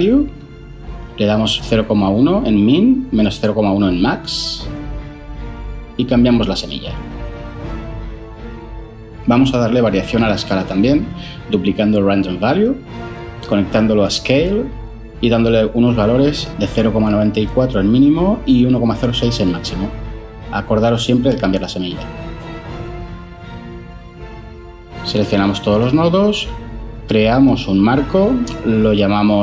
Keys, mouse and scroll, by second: 0.2 Return, 2.5-4.6 typing, 3.2 Tab, 11.0 shift+d, 15.9-16.9 typing, 18.1 4, 18.5 Return, 20.3-21.0 typing, 21.6 Return, 26.2 ctrl+j, 26.5 F2, 27.1-29.4 typing.